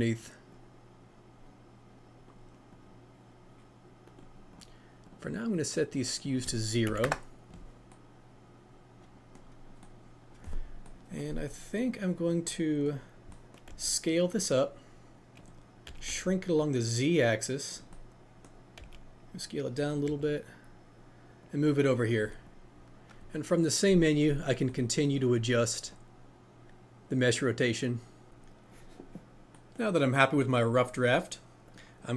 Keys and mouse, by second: 0.6-2.3 drag, 2.8-4.1 drag, 4.6 click, 5.5 click, 6.0-7.0 drag, 11.9 click, 15.8 s, 16.1 z, 17.7 click, 18.8 s, 22.5-24.4 drag, 25.9-28.3 drag, 31.6 click.